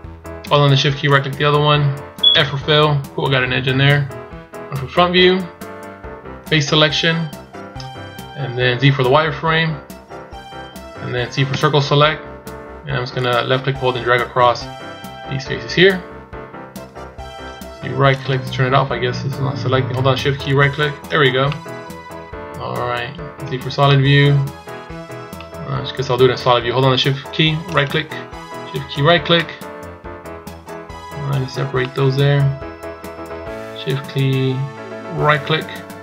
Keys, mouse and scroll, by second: 0.9 shift+right click, 2.1 f, 3.0-3.9 scroll down 1, 3.9 scroll down 1, 3.9 KP_1, 4.9 scroll down 1, 5.6 scroll down 1, 6.3 click, 7.9 scroll down 1, 8.7 z, 11.4 c, 18.2 right click, 18.5 scroll up 1, 20.3 shift+right click, 21.3 middle click, 23.3 z, 27.5 shift+right click, 28.8 shift+right click, 29.1 middle click, 35.1 shift+right click.